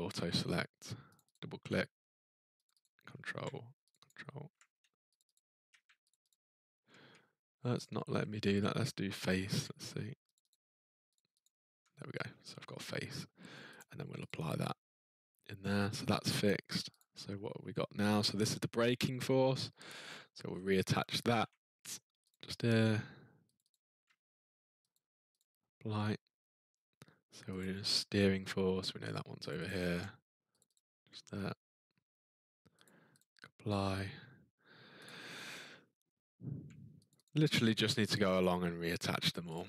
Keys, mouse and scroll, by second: 1.1 click, 1.3 click, 2.6 ctrl+click, 2.8 ctrl+click, 3.9 click, 4.0 ctrl+click, 5.2 shift+click, 5.3 shift+click, 6.1 shift+click, 6.3 ctrl+click, 7.8 shift+click, 9.3 click, 10.3 ctrl+click, 10.5 ctrl+click, 11.1 ctrl+click, 11.4 ctrl+click, 13.7 ctrl+click, 14.2 click, 17.0 click, 20.1-21.3 scroll, 21.3-21.9 scroll, 21.9 scroll down 7, 22.0 scroll, 22.3 click, 22.5 click, 23.5 ctrl+click, 23.7 ctrl+click, 24.9 click, 25.3 click, 26.0-26.3 ctrl+scroll, 27.6 click, 29.5 click, 29.6 click, 30.6 ctrl+click, 30.7 ctrl+click, 32.8 click, 33.2 click, 35.0 click, 37.1 ctrl+click, 37.2 ctrl+click, 38.2 click, 38.4 click, 39.5 click.